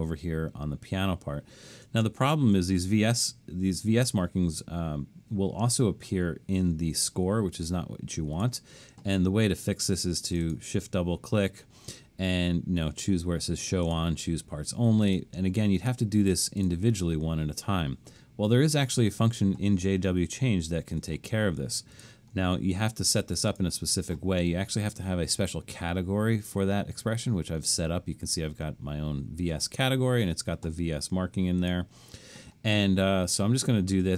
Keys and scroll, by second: 2.1 alt+super+..